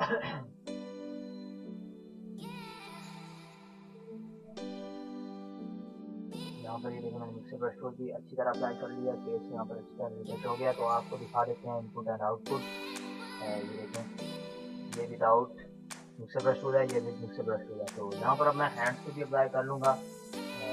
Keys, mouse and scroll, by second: 3.4 ], 3.7-5.4 drag, 5.4 ], 5.5 click, 5.6 ], 5.9-9.7 drag, 10.4 ctrl+z, 11.2 [, 11.4 [, 11.6 [, 11.6 click, 12.6 ctrl+-, 13.1 ctrl+space, 13.2 click, 13.4 ctrl+=, 13.7 ctrl+space, 13.8 click, 17.4 space, 17.6 click, 17.8 space, 17.9 click, 18.0 space, 19.0 click, 19.2 ], 19.6 ], 19.6 ], 19.8 ], 20.0-20.7 drag.